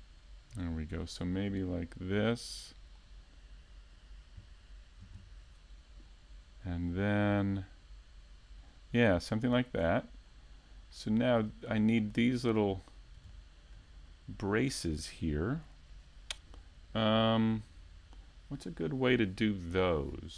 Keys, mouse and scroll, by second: 0.3 ctrl+KP_Add, 2.1 shift+right click, 2.5 middle click, 4.0 shift+right click, 4.0 middle click, 4.3 middle click, 5.1 click, 6.4 Tab, 7.3 click, 12.4 Tab, 13.4 click, 15.3 Tab, 15.5-16.1 scroll down 3, 15.7 a, 16.1 middle click, 16.9-18.0 scroll down 3, 17.3 shift+middle click, 18.0 shift+middle click.